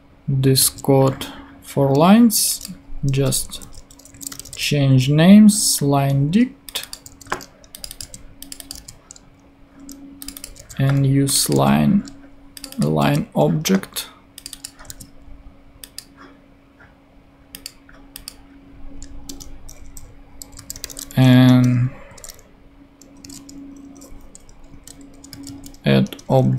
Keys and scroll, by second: 3.1 Right, 4.0-4.8 typing, 7.1 super+c, 8.0 super+v, 10.5 super+c, 11.5 super+v, 14.8 super+v, 19.2 Return, 20.3-22.1 typing, 21.4 Return, 23.2 space, 23.3 ], 24.2 Left, 24.7 a, 25.3 d, 26.0 Return.